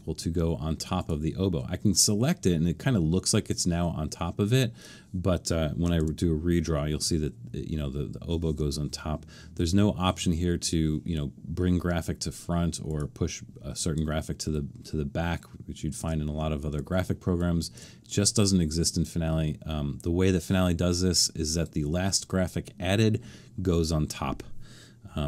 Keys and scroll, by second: 6.0 super+d.